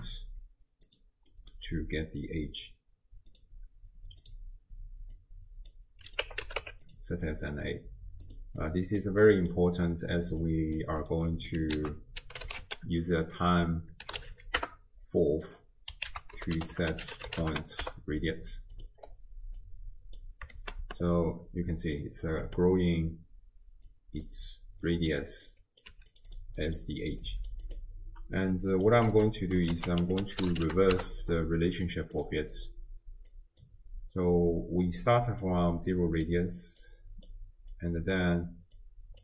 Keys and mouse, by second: 1.3 middle click, 3.3-4.3 drag, 5.2 click, 6.1 click, 7.3 middle click, 8.3 click, 8.6 click, 9.2 middle click, 10.4 click, 11.0 click, 11.3 middle click, 11.8 ctrl+a, 14.4 l, 16.1 ctrl+a, 19.6-20.3 drag, 20.6 shift+space, 22.6 space, 23.9 click, 24.8 middle click, 25.7 click, 25.9 g, 26.3 drag, 26.6 click, 27.2 click, 27.7 click, 28.7-29.4 drag, 29.7 ctrl+a, 33.3 click, 35.5-36.6 drag, 37.0 click, 37.8 click, 38.1 click, 38.8 click.